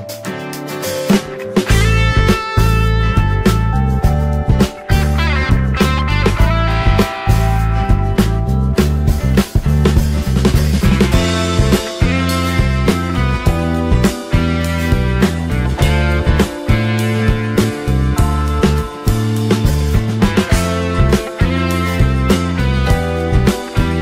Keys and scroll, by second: 16.8 ctrl+t.